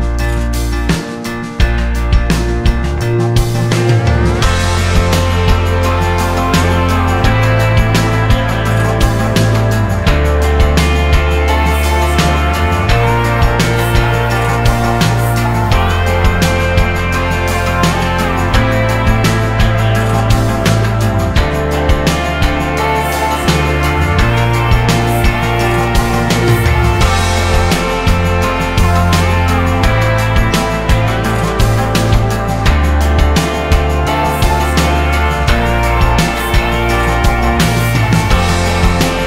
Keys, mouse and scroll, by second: 0.5 click, 1.6 click, 2.3 click, 3.7 click, 4.6 click, 5.7 click, 6.5 click, 7.6 click, 8.6 scroll down 1, 9.1 scroll up 2, 11.0-11.6 drag, 15.0 click, 16.9 click, 17.3 click, 17.6 scroll down 2, 18.3-19.7 scroll down 8, 19.7 click, 20.5 click, 20.9 scroll down 1, 21.9 click, 22.6 click, 23.1 scroll down 2, 23.6 click, 24.8 click, 25.0 scroll up 2, 25.7 click, 26.3 click, 27.1 click, 27.4 click, 27.8 click, 28.3 click, 28.8-31.1 drag, 32.1 click, 32.9 click, 34.7 click, 35.1 click, 36.6 click, 36.9-38.6 drag, 38.8-39.2 right drag.